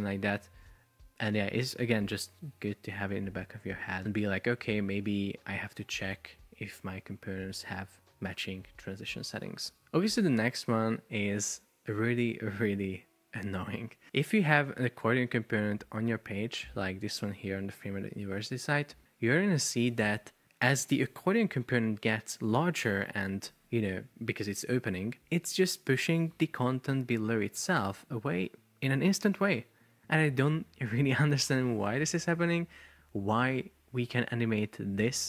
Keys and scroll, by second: 9.8 super+p, 33.4 shift+super+4.